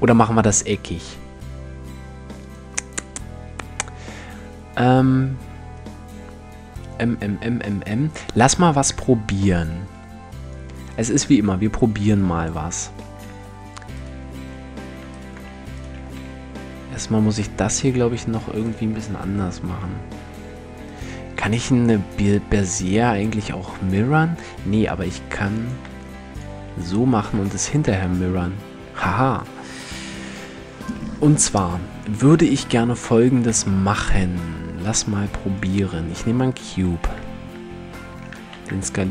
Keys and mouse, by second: 10.1-12.0 drag, 12.9 Tab, 13.6-17.3 right drag, 15.7 r, 17.5-18.5 right drag, 19.2 g, 19.2 click, 21.3 a, 24.7 b, 25.5 x, 27.5 Tab, 28.3 Tab, 32.0 Tab, 33.1 shift+a, 37.7 s.